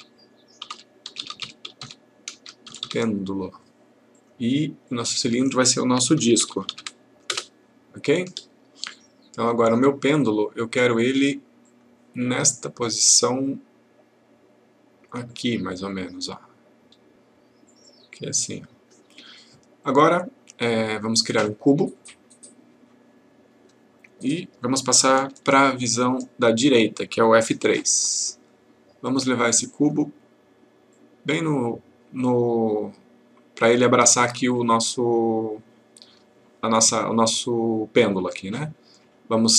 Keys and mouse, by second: 2.6 typing, 4.1 click, 9.7 click, 11.6 click, 25.5 F3, 29.0-30.0 click.